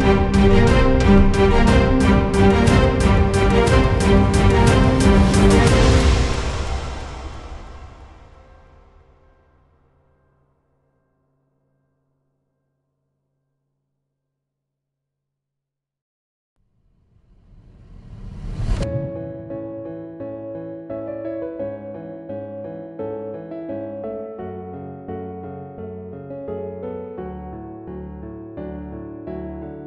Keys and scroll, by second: 1.0-3.0 typing, 3.3 Up, 3.6 Up, 3.6 Return, 23.1-25.4 typing, 25.8 Return.